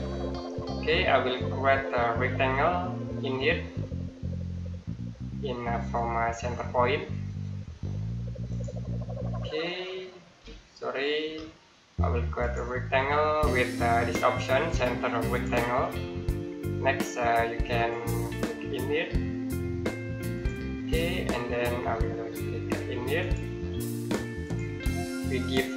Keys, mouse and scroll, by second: 1.4 middle click, 2.0-4.7 scroll down 1, 8.3-10.6 scroll down 1, 10.6 click, 11.0 Escape, 12.2 click, 15.1 click, 17.8 click, 20.7 middle click, 23.0 click.